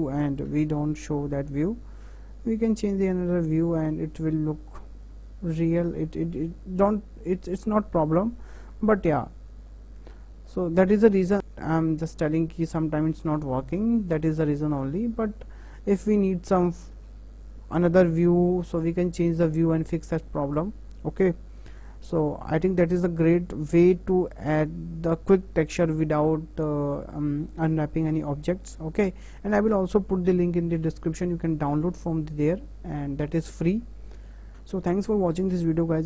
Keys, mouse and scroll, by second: 0.4 middle click, 0.6 KP_0, 1.6-4.6 middle drag, 6.4 KP_0, 9.7 middle drag, 10.0 middle click, 10.2 middle click, 10.4 middle click, 10.7 scroll up 4, 13.5 scroll down 2, 13.8 middle click, 14.0 middle click, 14.6 scroll down 2, 14.9-15.9 middle drag, 15.9-16.6 scroll up 4, 17.1 KP_0, 18.7 click, 34.5 scroll down 4.